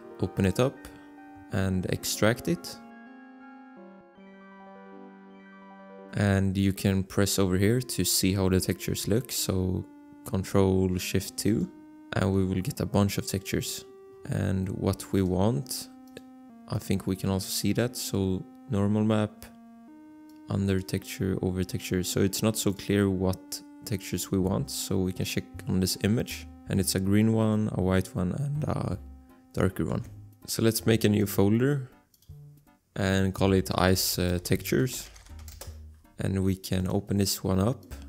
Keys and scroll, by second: 30.1 alt+Tab, 33.8-35.9 typing.